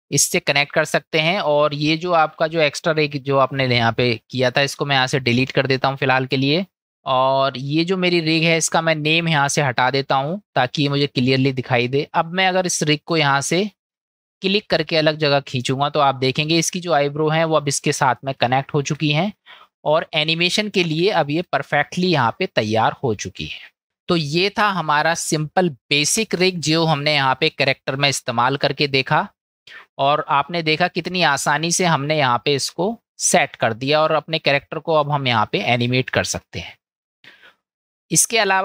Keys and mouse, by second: 3.8 Delete, 7.5 click, 9.2 click, 10.3 middle drag, 13.1 click, 15.2-16.5 drag, 18.6-18.9 shift+middle drag, 19.7-20.6 middle drag, 21.1-21.4 shift+middle drag, 22.2-23.4 middle drag, 24.3 KP_Decimal, 28.2 shift+a, 35.8 click, 36.7 click, 38.0 middle click.